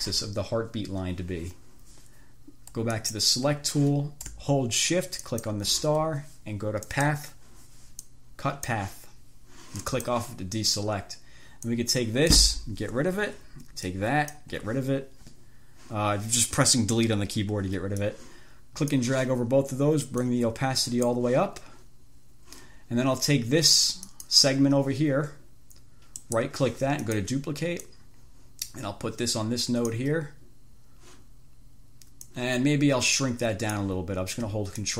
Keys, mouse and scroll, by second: 3.2 click, 5.5 shift+click, 7.1 click, 8.3-9.2 drag, 10.2 click, 12.0 click, 13.4 Delete, 14.2 click, 14.8 Delete, 18.2-19.4 drag, 20.4-21.6 drag, 24.4 click, 26.6 right click, 27.4 click, 28.2-30.4 drag, 32.6-34.2 drag.